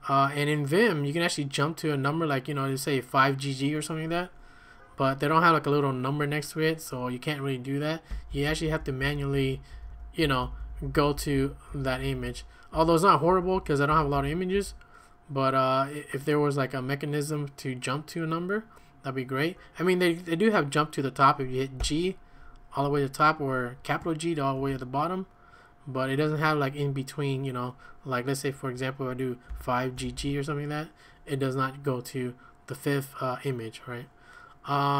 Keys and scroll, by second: 7.9-15.0 typing, 21.8 g, 24.3-25.2 typing, 29.2-30.7 typing.